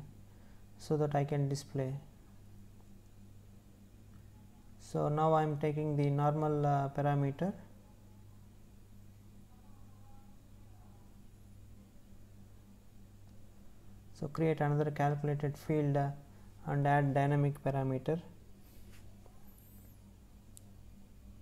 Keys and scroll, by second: 0.8 space, 17.3 space.